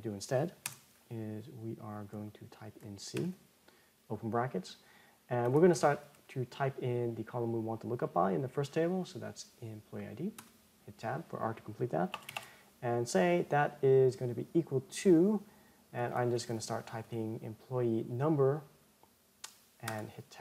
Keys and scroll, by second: 10.9 Tab, 20.3 Tab.